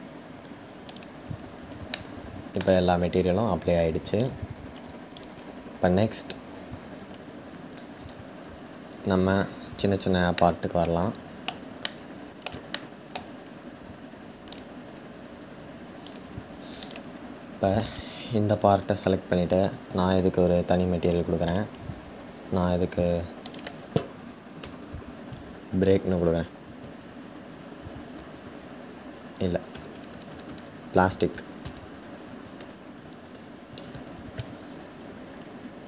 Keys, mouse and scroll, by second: 1.6-2.6 middle drag, 2.6-3.3 scroll down 1, 3.3-3.9 scroll down 1, 3.9-7.4 drag, 7.4-8.6 scroll up 8, 10.0-14.1 shift+middle drag, 14.1-16.5 drag, 21.4-35.7 drag.